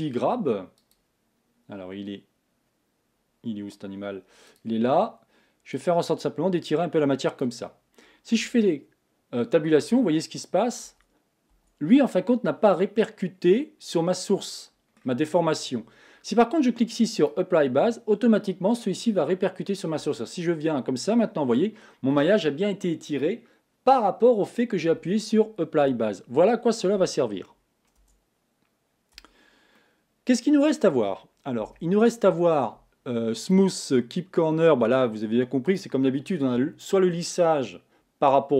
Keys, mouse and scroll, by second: 8.5 Tab, 10.0 Tab, 13.0-15.1 middle drag, 15.1-15.8 scroll up 1, 17.6-20.1 drag, 20.1 Tab, 20.6 scroll down 2, 21.2-29.4 middle drag, 29.4 Tab, 29.8-31.6 middle drag, 31.6 KP_1.